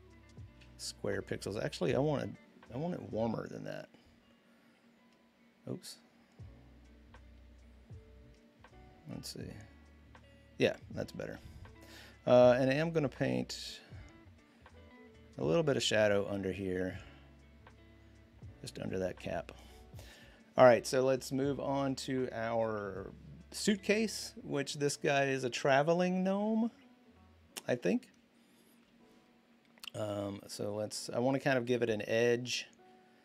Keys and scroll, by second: 0.4 ctrl+z, 11.1 ctrl+d, 12.5 b, 14.1-14.4 typing, 30.6 typing.